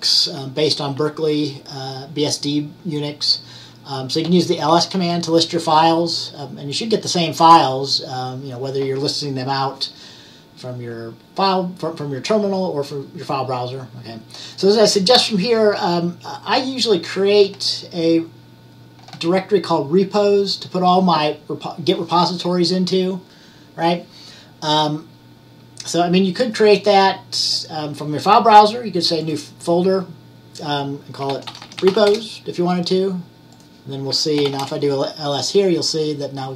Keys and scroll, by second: 31.2-32.5 typing, 34.2-35.0 typing.